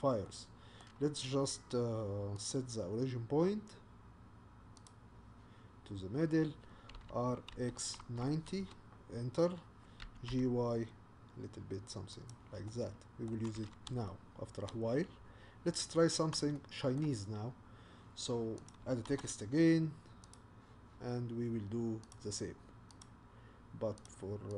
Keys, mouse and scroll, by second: 0.3-4.8 middle drag, 4.8-7.0 right drag, 7.0 r, 10.0 g, 12.7-15.2 middle drag, 15.2-15.5 scroll down 1, 15.5-16.0 scroll up 1, 16.0-16.6 scroll down 2, 16.6-17.6 shift+middle drag, 17.6-18.7 scroll up 2, 18.7 click, 20.3 shift+a.